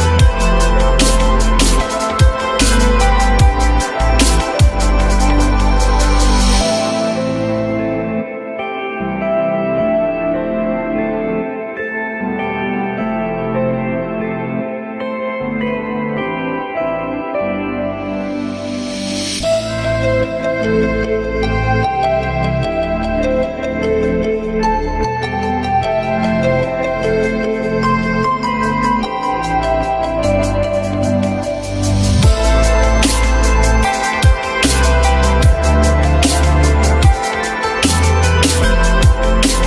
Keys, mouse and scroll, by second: 1.2 alt+middle click, 2.5 s, 5.9 F4, 6.9 alt+middle click, 8.7 p, 10.0 q, 10.7 alt+middle click, 13.0 alt+middle click, 14.8 alt+middle click, 17.9 F3.